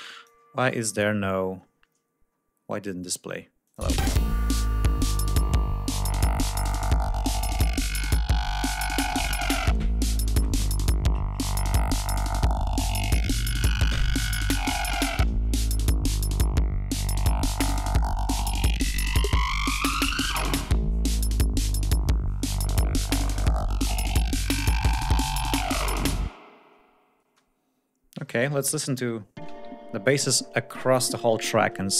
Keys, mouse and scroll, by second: 0.0 click, 0.6-1.3 scroll down 2, 1.7-2.5 scroll down 3, 2.6-3.3 scroll up 4, 3.7 ctrl+click, 3.8 space, 8.1 ctrl+scroll down 2, 8.3 ctrl+scroll up 2, 15.5 ctrl+scroll down 2, 15.9 ctrl+scroll up 2, 27.2 space, 29.0 Home, 29.4 space, 29.8-30.7 ctrl+scroll down 4.